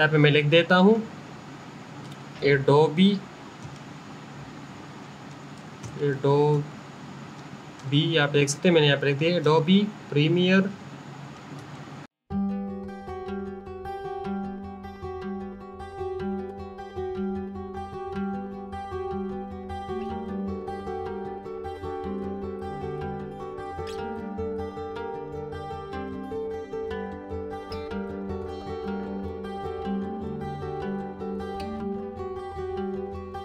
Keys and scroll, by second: 1.5 a, 2.8 d, 4.5-7.0 typing, 8.6 space, 10.5-11.3 typing, 13.1 i, 13.9 m, 16.9 u, 17.8 y, 18.6 BackSpace, 20.3-27.6 typing, 30.8-33.4 typing.